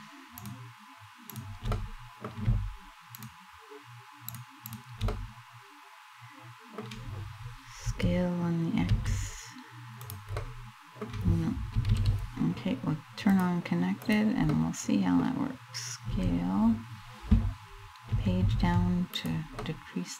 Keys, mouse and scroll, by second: 0.8 shift+right click, 1.3 middle click, 2.8 shift+right click, 4.0 shift+right click, 4.3 shift+right click, 4.8 middle click, 5.3 middle click, 6.1 middle click, 7.5 s, 9.7 click, 10.0 middle click, 11.4 middle click, 11.5 ctrl+z, 12.9 click, 14.2 middle click, 15.7 s, 18.8 click, 19.3 middle click.